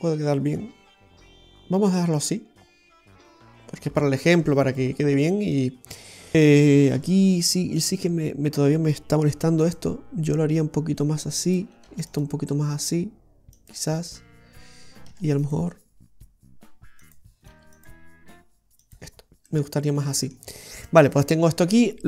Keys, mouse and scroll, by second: 5.5 right click, 6.3-7.0 scroll up 1, 6.3 g, 7.0 Tab, 7.8 right click, 8.0 Tab, 9.4 ctrl+r, 11.9 ctrl+r, 14.4 scroll down 1, 15.2 ctrl+r, 17.6 ctrl+r, 19.3 scroll down 1, 19.5 middle click.